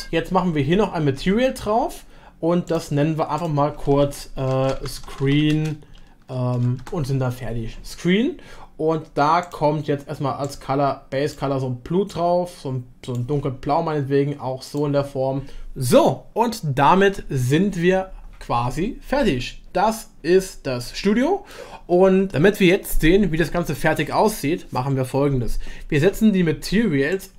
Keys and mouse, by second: 2.6-4.0 drag, 6.0 shift+e, 7.6 click, 9.4-10.4 drag, 20.9 middle click, 27.1 click.